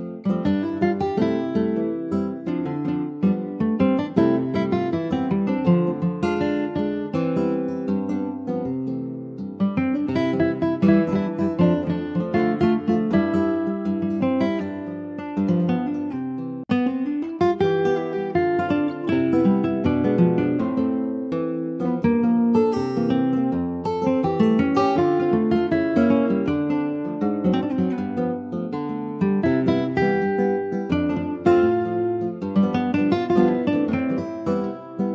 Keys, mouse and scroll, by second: 1.5-2.6 drag, 3.6 click, 6.3 Tab, 6.6 click, 6.8 scroll down 2, 7.0 alt+z, 7.4 middle click, 7.7 click, 8.0-9.2 middle drag, 9.2 scroll up 1, 9.5 ctrl+s, 9.7 click, 10.2 shift+click, 10.6-12.2 middle drag, 12.2 ctrl+j, 12.5 click, 12.7-13.0 scroll down 2, 13.0 middle click, 13.4 click, 13.6 scroll down 1, 13.8-15.4 shift+middle drag, 15.4 ctrl+s, 15.5 click, 15.7 shift+middle click, 16.0 scroll up 2, 16.2 middle click, 16.7 ctrl+s, 16.8 scroll up 1, 17.0 middle click, 17.5 shift+a, 20.0 ctrl+z, 21.2-24.2 shift+right drag, 24.2 ctrl+z, 24.4 click, 25.0 ctrl+s, 25.5 shift+a, 27.0 alt+middle click, 27.8 alt+middle click, 28.6 s, 30.6 alt+middle click, 30.8-31.5 alt+scroll up 3, 32.1 middle click, 32.8 ctrl+s, 32.9 middle click, 33.2-33.6 scroll up 2, 33.7-35.1 shift+middle drag.